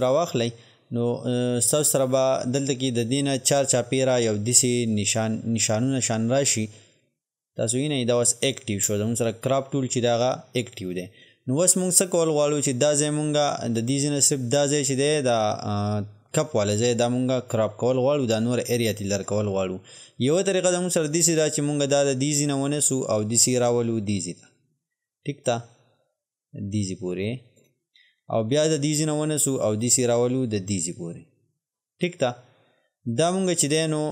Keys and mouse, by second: 22.3-34.1 drag.